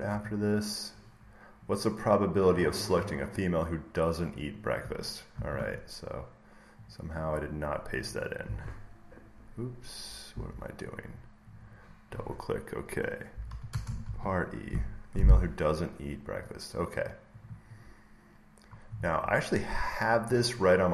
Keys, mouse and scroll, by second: 0.0 scroll up 1, 0.2 scroll, 0.3-0.6 scroll up 1, 0.6 scroll, 1.0 scroll down 1, 1.1-2.8 middle drag, 4.5 click, 5.3 ctrl+c, 6.8 click, 7.2 click, 7.8 click, 8.0 click, 8.4 e, 10.2 Escape, 11.4-13.6 drag, 13.0-13.9 typing, 13.7 click, 13.9 ctrl+v, 16.3 click, 17.3 click, 18.3 scroll up 1, 19.5 scroll, 20.0 click.